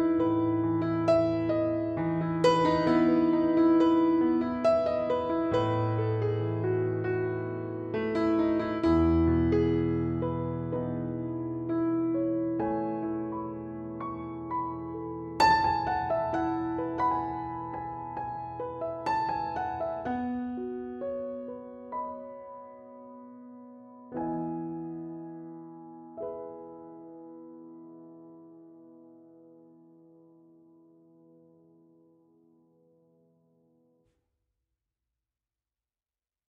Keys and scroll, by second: 4.7 super+-, 11.7 super+-, 12.0 super+s, 13.5 super+0, 17.4 super+-, 17.4 super+0, 17.5 super+s, 21.4 Left, 22.9 Down, 25.3 Up, 25.7 Down, 26.2 Up, 27.1 f.